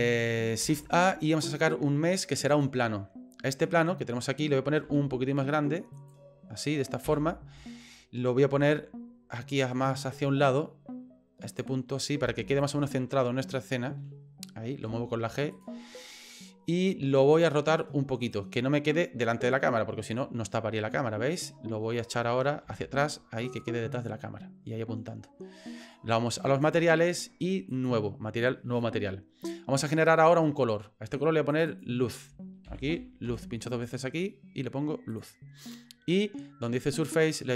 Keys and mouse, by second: 0.6 shift+a, 3.6 middle click, 4.8 s, 7.0 KP_7, 8.5 g, 12.2 s, 14.9 g, 16.0 middle click, 19.3-21.4 drag, 22.6 g, 24.0 middle click, 26.6 click, 27.9 click, 31.5-35.2 drag, 37.2-37.5 drag.